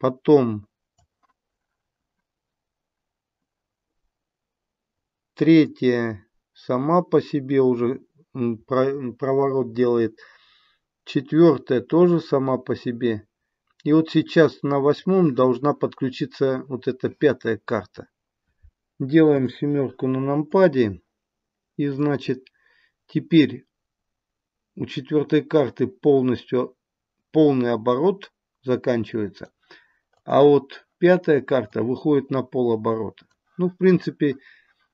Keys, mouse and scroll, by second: 5.6 click, 19.3 KP_7, 20.5 click, 21.9 click, 30.1 click, 31.7 click.